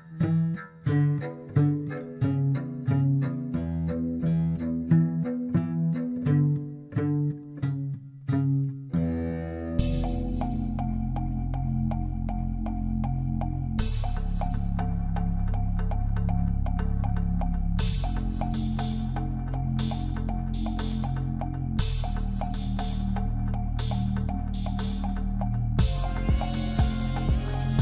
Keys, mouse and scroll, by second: 0.4 click, 0.8-1.8 scroll up 1, 1.8 e, 4.1 s, 6.7-7.8 middle drag, 7.8 f, 9.0 ctrl+b, 10.1 Tab, 10.4 scroll down 1, 10.5-11.5 middle drag, 11.5-12.0 scroll up 3, 12.0 Tab, 12.3 middle click, 13.2 ctrl+r, 14.6 Tab, 14.9-16.2 middle drag, 16.2 click, 16.4 scroll down 3, 16.6-17.9 middle drag, 17.9-18.7 scroll up 1, 18.7 scroll up 3, 19.0 Tab, 19.3-20.7 middle drag, 20.7 KP_1, 21.7 shift+z, 22.1 click, 23.5 g, 25.1 Tab, 25.7 shift+z, 26.0-26.8 scroll down 1, 26.8 scroll up 3, 27.0-27.7 middle drag, 27.7 Tab.